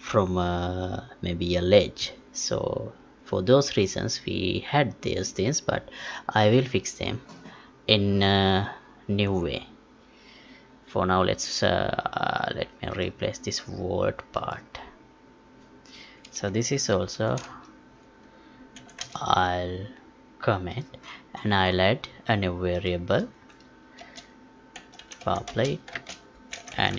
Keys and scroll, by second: 18.7 ctrl+k, 25.9 space.